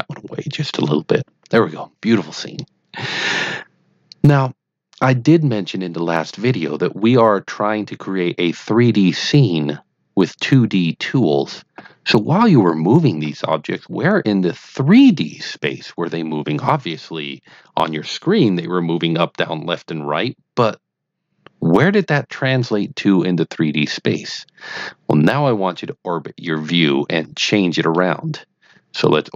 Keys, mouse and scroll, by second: 28.0-29.3 middle drag.